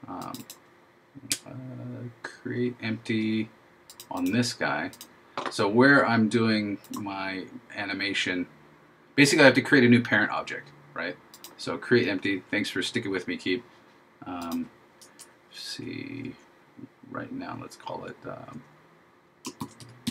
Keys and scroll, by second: 19.7 shift+k.